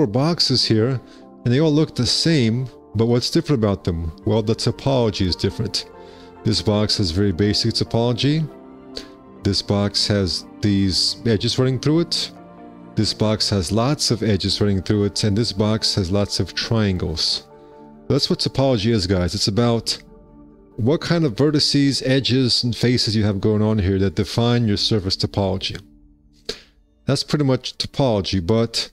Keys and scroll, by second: 5.1 F4, 25.2 F4, 27.9 x.